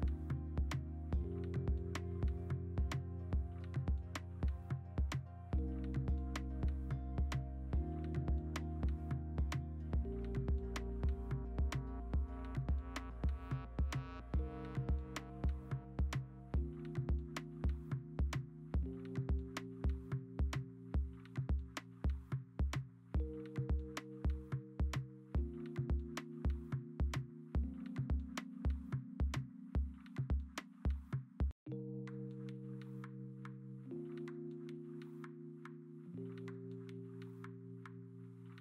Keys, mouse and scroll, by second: 0.3 v, 2.1 ctrl+u, 3.0 v, 3.5 m, 4.1 ctrl+d, 6.5 ctrl+g, 6.7 v, 8.0 Return, 8.0 ctrl+t, 8.8 v, 10.0 v, 12.5 b, 13.3 0, 13.6 ctrl+z, 15.2 x, 16.7 ctrl+alt+g, 16.8 b, 18.6 e, 19.3 ctrl+z, 20.9 ctrl+z, 21.0 1, 21.8 3, 23.1 ctrl+alt+g, 23.4 ctrl+z, 23.6-24.8 typing, 25.0 scroll, 25.9-26.4 scroll, 28.5 v, 29.7 alt+Tab, 30.1 Return, 31.6 Return, 33.4 ctrl+alt+g, 33.6 v, 34.0 ctrl+t, 34.7 v, 35.2 ctrl+t, 35.8 v, 36.6 m.